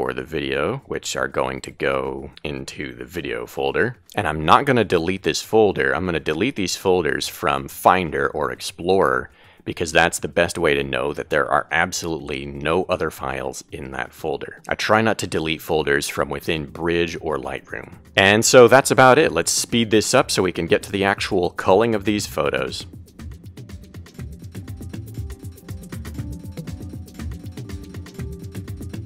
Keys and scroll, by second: 2.1 super+a, 20.7-21.3 typing, 22.0 Return, 22.4 Right, 22.5 Up, 23.3 Down, 24.0 Left, 24.5-26.3 typing, 26.6 Return, 26.8 Right, 27.3 Right, 28.0-29.0 typing.